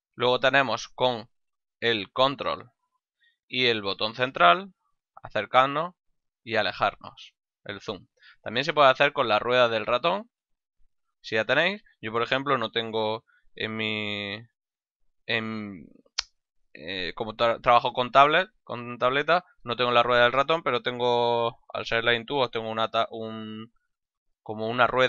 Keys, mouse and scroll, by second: 3.6 ctrl+middle click.